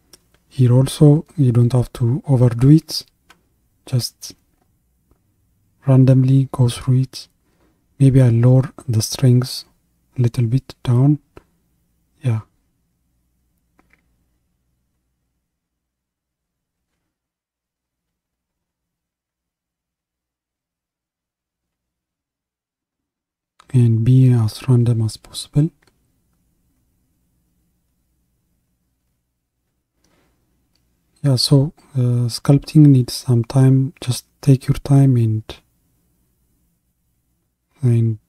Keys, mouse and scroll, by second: 34.6-38.2 middle drag.